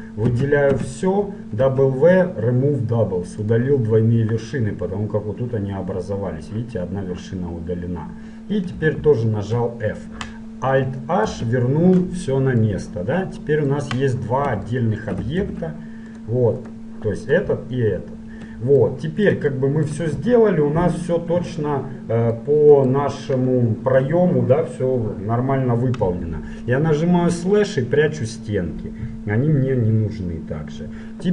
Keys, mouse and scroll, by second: 0.4 a, 0.8 a, 1.7 w, 8.9 f, 11.3 alt+h, 12.8 middle click, 13.5 middle click, 14.0 middle click, 14.9 middle click, 15.5 ctrl+Tab, 16.8-19.1 right drag, 19.1 middle click, 19.7 middle click, 27.1 KP_Divide.